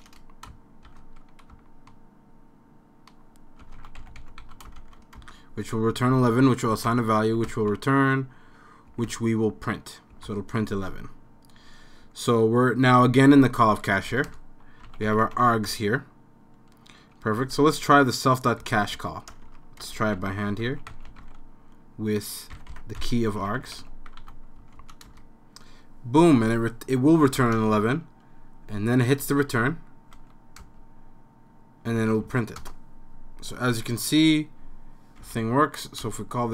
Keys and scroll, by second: 0.0-1.4 typing, 3.4-5.3 typing, 6.5-7.5 typing, 9.0 typing, 10.3 Return, 14.1-15.9 typing, 14.3 Return, 17.2-24.7 typing, 25.1 Return, 27.4 typing, 30.2 n, 30.6 Return, 32.3 c, 32.6 Return, 35.2 Left, 36.0 Up, 36.0 Return.